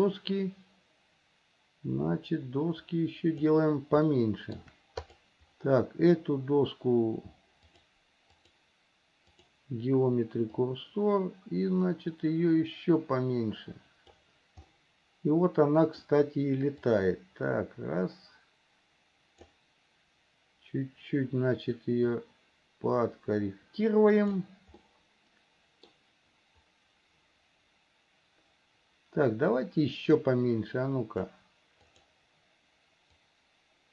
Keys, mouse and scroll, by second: 0.4-3.7 drag, 4.3 shift+middle click, 5.3 click, 7.9-9.8 drag, 10.7-14.4 drag, 14.9-16.3 middle drag, 17.0-19.8 drag, 22.3 click, 22.9-24.6 drag, 25.1-26.1 middle drag, 30.5-31.6 drag, 32.1 click, 33.5-33.9 drag.